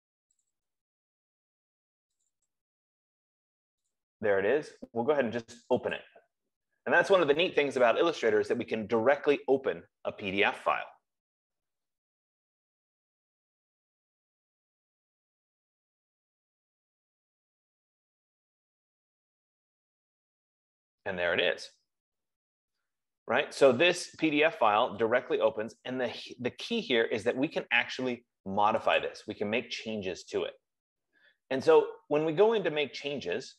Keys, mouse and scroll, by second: 0.8 click, 1.2 click, 2.7 click, 3.0 click, 4.3 click, 6.5 click, 23.3-23.8 scroll, 24.5 scroll, 25.3-25.7 scroll, 29.4 click, 31.7 middle click, 31.8 middle click, 32.7 F15, 32.8 middle click, 33.1-33.5 scroll.